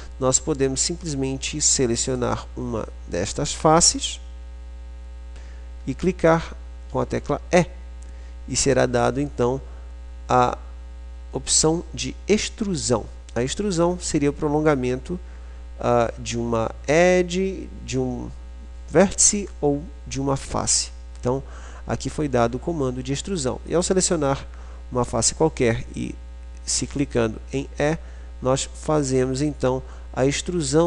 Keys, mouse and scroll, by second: 2.2-4.2 middle drag, 7.0 e, 11.7-13.2 drag, 13.3 middle click, 15.8-23.8 middle drag, 25.5 right click, 26.8 e.